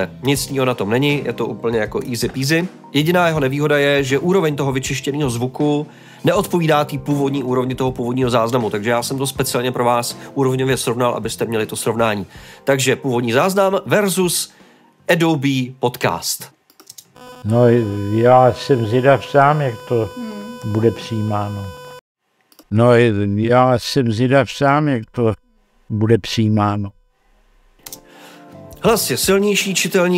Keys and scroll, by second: 16.5 space, 16.8 space, 21.9 space.